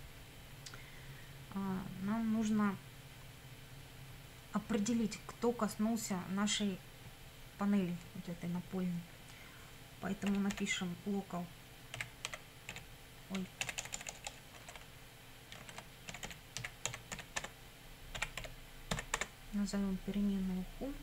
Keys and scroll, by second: 10.0-13.7 typing, 15.8-19.2 typing.